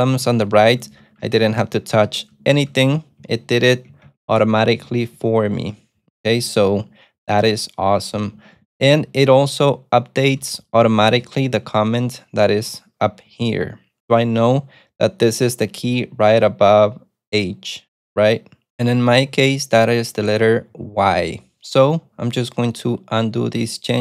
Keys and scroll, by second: 0.0-4.6 typing, 6.4 shift+w, 6.6 shift+w, 6.8 shift+w, 8.0-13.7 typing, 23.6 u.